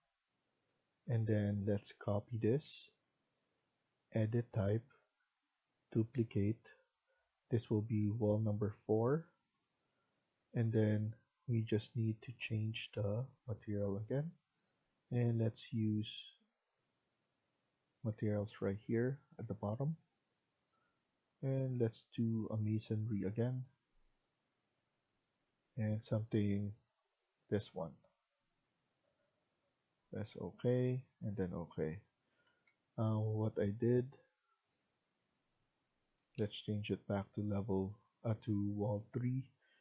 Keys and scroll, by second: 32.1 Escape, 32.4 Escape, 32.6 Escape, 36.1 Escape, 36.3 Escape.